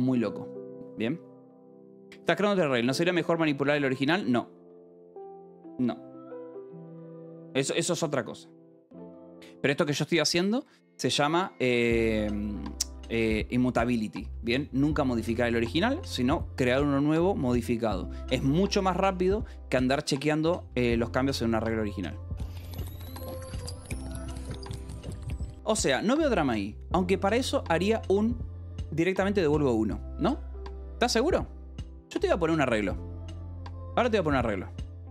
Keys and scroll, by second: 14.3 alt+Tab, 18.4 Escape, 19.0 k, 19.7 l, 20.6 Escape, 32.9-35.1 typing.